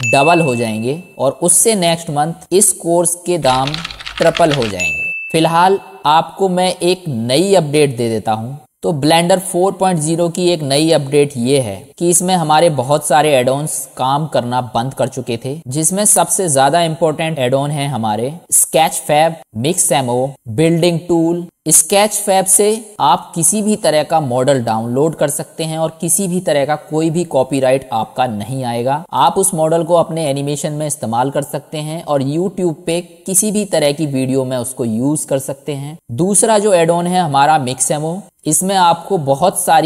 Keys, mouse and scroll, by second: 21.4-24.5 drag, 25.8 middle click, 26.0 middle click, 27.0 middle click, 27.9 middle click, 28.2 middle click, 28.9 middle click, 29.6 click, 29.6 middle click, 30.4 middle click, 32.8-33.8 middle drag.